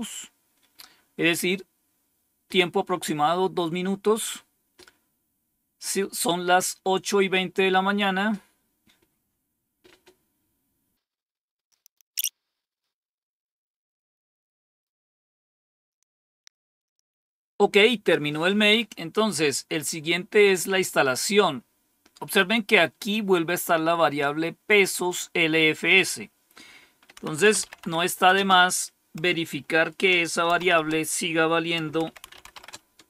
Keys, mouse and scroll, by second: 11.9 scroll down 1, 12.0 click, 22.3-24.1 drag, 25.7 click, 26.9-28.3 typing, 30.4 typing, 31.7-32.9 typing.